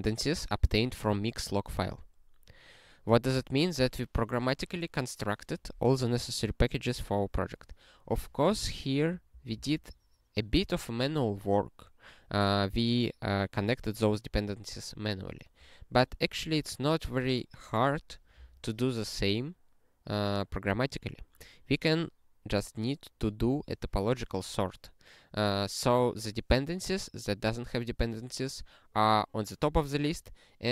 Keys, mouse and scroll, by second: 9.3 ctrl+p, 9.5 ctrl+p.